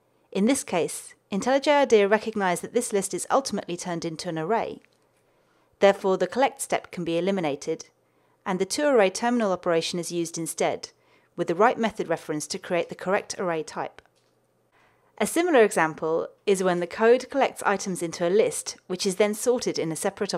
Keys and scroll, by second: 7.8 alt+Return, 11.6 ctrl+alt+shift+Left.